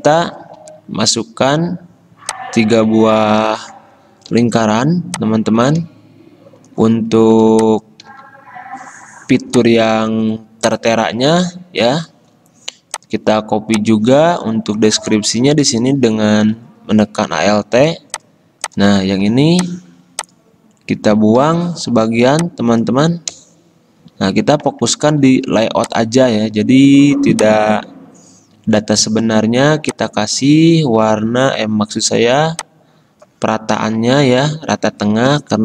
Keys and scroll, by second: 0.8 m, 5.7 ctrl+z, 5.7 i, 7.9 v, 16.8 d, 21.6 t, 23.5 BackSpace, 24.2 BackSpace, 24.4 BackSpace, 32.1 t, 33.9 BackSpace, 34.5 BackSpace.